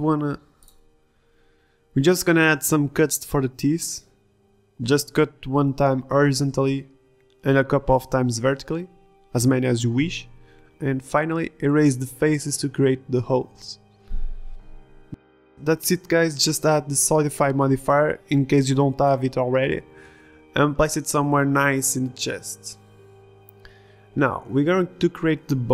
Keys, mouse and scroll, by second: 3.5-4.3 middle drag, 4.9 KP_1, 5.0 z, 5.3 Tab, 5.9 ctrl+r, 7.8 ctrl+z, 7.8 ctrl+Tab, 8.9 Tab, 9.0 Tab, 9.1 ctrl+r, 9.6 a, 9.9 ctrl+r, 10.5 ctrl+Tab, 11.1 ctrl+r, 11.5 ctrl+Tab, 13.4 Delete, 14.9 ctrl+Tab, 15.9 s, 16.3 r, 19.0 middle drag, 19.3 s, 20.3 KP_1, 21.9 click.